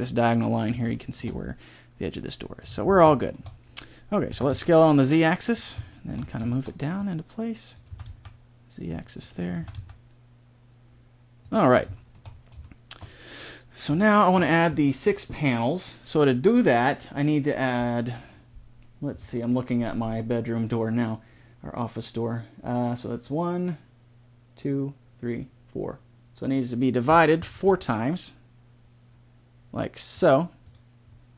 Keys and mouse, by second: 4.2 s, 6.9-8.8 drag, 7.9 s, 9.5 s, 11.9 middle click, 27.4 ctrl+r.